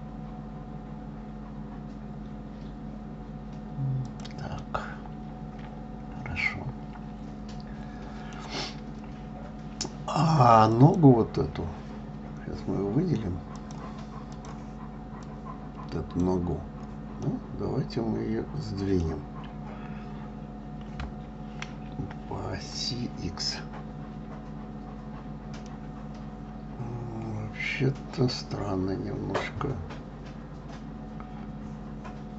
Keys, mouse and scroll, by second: 5.0-8.0 middle drag, 11.1 click, 13.9-15.8 drag, 17.6-20.6 middle drag, 21.4 KP_3, 26.0-29.1 middle drag.